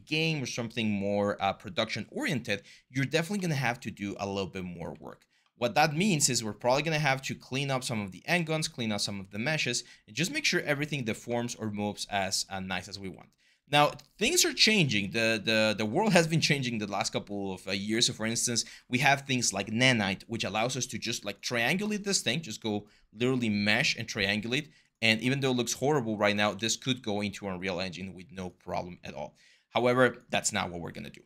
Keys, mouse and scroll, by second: 7.7 r, 8.9 4, 12.4 5, 12.7 r, 26.2 ctrl+z, 26.6 ctrl+z.